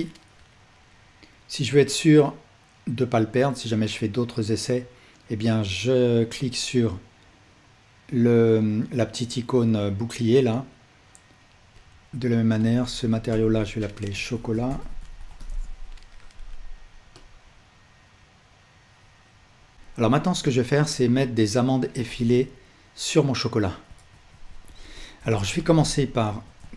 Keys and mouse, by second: 11.4-12.7 drag, 13.3-17.2 drag, 19.7 ctrl+z, 19.7-20.2 drag, 24.1 ctrl+s, 26.1 shift+middle click.